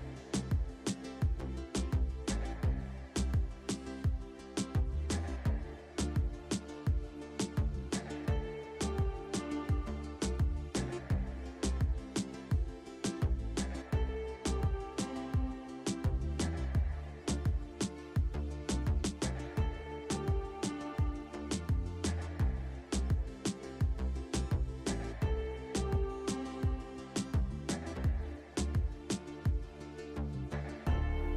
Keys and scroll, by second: 0.5 alt+w, 2.3 alt+w, 4.9 alt+w, 5.8 alt+w, 7.4 alt+w, 8.6 alt+w, 10.4 alt+w, 11.9 alt+w, 14.9 alt+w, 16.1 alt+w, 18.6 alt+w, 20.8 alt+w, 23.6 alt+w, 25.0 alt+w, 26.3 alt+w, 27.9 alt+w, 29.2 alt+w, 30.8 alt+w.